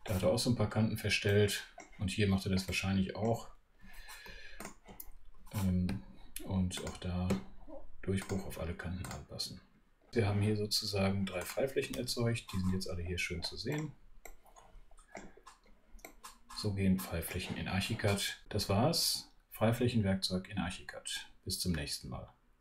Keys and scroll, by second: 5.9 space.